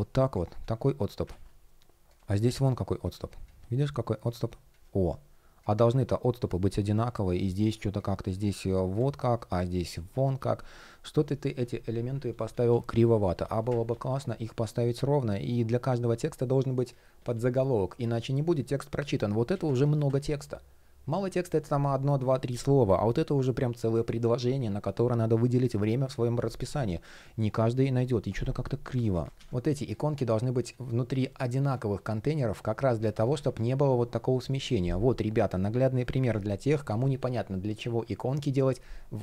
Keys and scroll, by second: 0.9 super+z, 11.9 super+z, 13.5 super+z, 18.7 shift+p, 28.1 shift+p, 29.2 super+z, 32.8 super+z, 33.9 shift+o, 36.5 super+z.